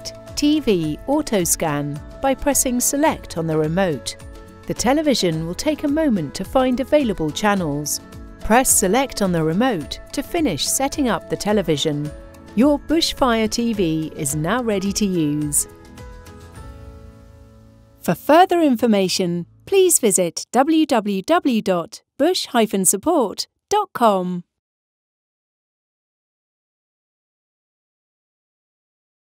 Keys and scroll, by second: 2.3 Return, 9.8 Return.